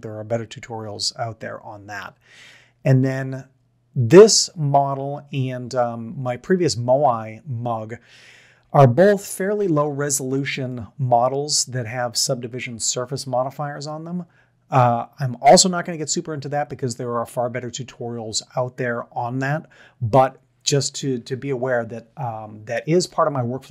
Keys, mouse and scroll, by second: 5.3-6.2 middle drag, 9.0 click, 9.5 Tab, 12.6 middle drag, 23.0-23.7 middle drag.